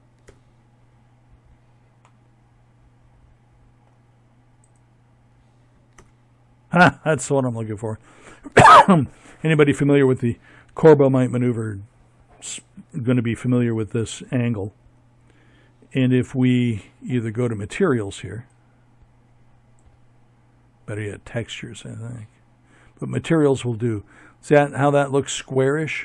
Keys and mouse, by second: 3.8 ctrl+KP_0, 16.3-18.3 drag.